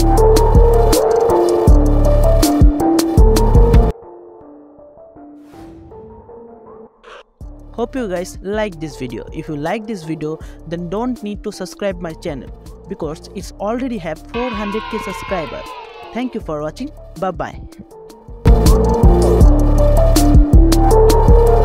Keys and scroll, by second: 0.6-2.2 typing, 2.6 ctrl+-.